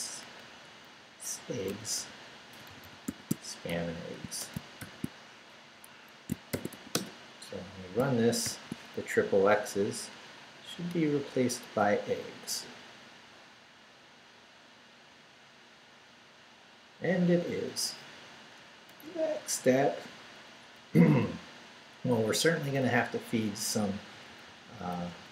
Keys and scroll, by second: 1.7-4.8 typing, 6.1 Escape, 6.3-7.2 typing, 8.0 shift+Return, 8.4 shift+;, 9.1 shift+Up, 10.9 Return, 18.9 Return, 19.9 Down, 20.5 Up, 21.0 Up, 23.7 Right.